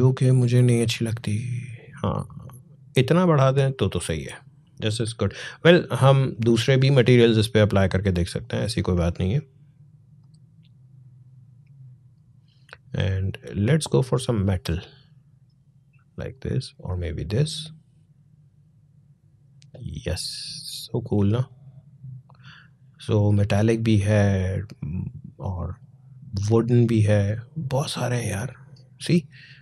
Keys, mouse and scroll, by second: 6.1 click, 10.0 click, 13.8 click, 16.7 click, 21.2-26.2 drag.